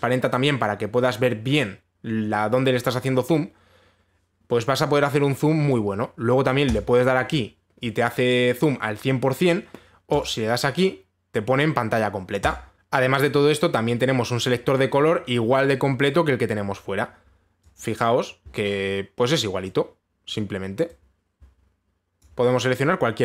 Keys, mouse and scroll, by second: 6.3 click, 7.3 click, 10.4 click, 10.8-12.7 drag, 16.3 click, 19.8 click, 20.9 click, 22.8 click.